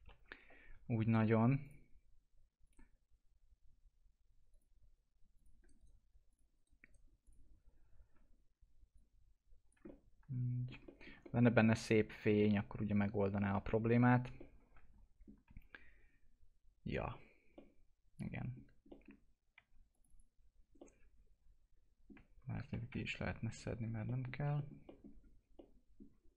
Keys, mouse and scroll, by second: 0.7 typing, 1.0 right click, 1.6 click, 5.5 right click, 6.3 click, 6.5 right click, 7.2 click, 9.8 alt+middle click, 10.8 middle click, 13.8-14.2 scroll down 1, 14.3-16.0 alt+middle drag, 16.0 scroll up 1, 17.5 middle click, 18.6 scroll down 1, 18.8 middle click, 19.5 2, 19.9 click, 20.5 scroll down 1, 20.7-22.6 alt+middle drag, 22.6 ctrl+Insert, 22.8 ctrl+BackSpace, 23.6 alt+middle click, 25.5-26.3 alt+middle drag.